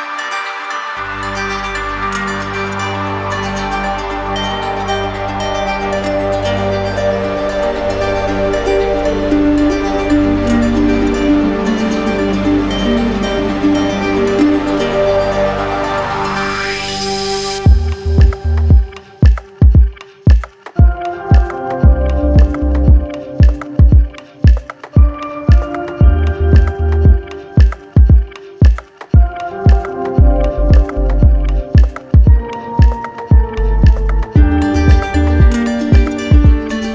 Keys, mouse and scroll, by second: 0.4 shift+click, 3.3 ctrl+click, 3.9 ctrl+click, 4.4 shift+click, 5.2 ctrl+click, 6.2 ctrl+click, 6.7 w, 10.5 alt+click, 16.5 click, 17.4 click, 18.4 click, 20.7 click, 20.9 ctrl+click, 20.9 ctrl+click, 21.6 shift+click, 22.6 click, 25.9 ctrl+click, 28.5 ctrl+click, 28.8 ctrl+click, 33.5 click, 33.6 click, 33.6 alt+click, 33.7 click, 33.8 alt+click, 34.0 right click, 34.4 click, 34.5 click, 34.9 click, 35.2 click, 35.3 ctrl+click, 35.5 ctrl+click, 35.5 w, 35.5 alt+click, 35.7 click, 35.8 click, 35.9 ctrl+click, 36.0 click, 36.0 click, 36.1 click, 36.2 shift+click, 36.2 ctrl+click, 36.4 click, 36.6 click, 36.7 ctrl+click.